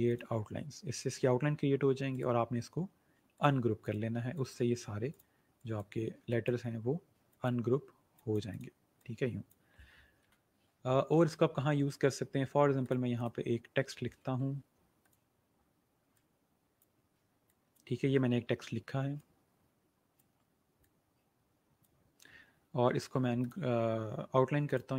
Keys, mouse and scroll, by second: 0.2 click, 2.1 right click, 3.2 click, 12.7 click, 14.1 shift+e, 14.9 click.